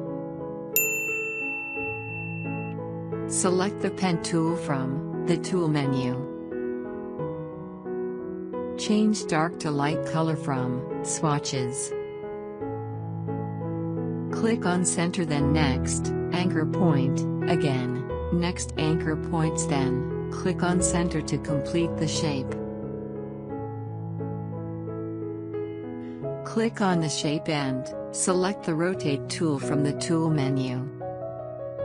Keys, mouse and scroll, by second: 7.1 click, 15.3 click, 19.4 click, 22.1 click, 29.6 click.